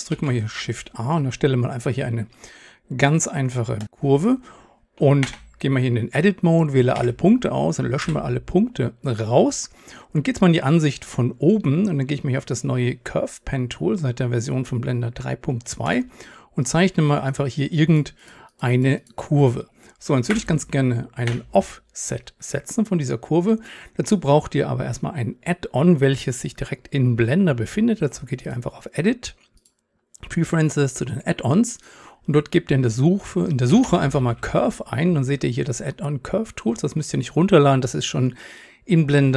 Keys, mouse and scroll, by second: 0.1 shift+a, 2.2-4.3 drag, 5.3 Tab, 7.0 a, 8.0 Delete, 11.0-16.0 drag, 20.3 Return, 21.3 Tab.